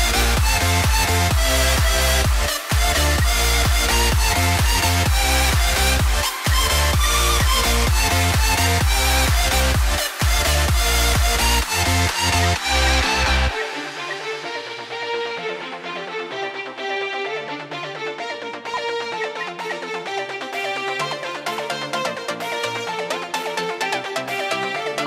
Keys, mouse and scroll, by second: 1.8 double click, 2.7-3.7 typing, 4.2 Return, 6.3 Left, 6.9 typing, 7.3 Return, 12.2 Right, 13.4 Delete, 14.0 Return, 15.4 double click, 19.0 shift+Right, 19.3 Delete, 19.6 Return, 21.0 double click.